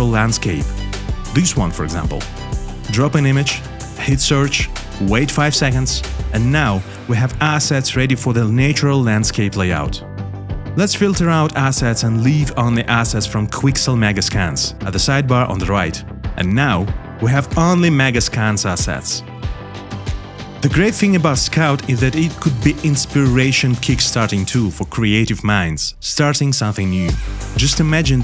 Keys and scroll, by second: 0.0 space, 1.4 space.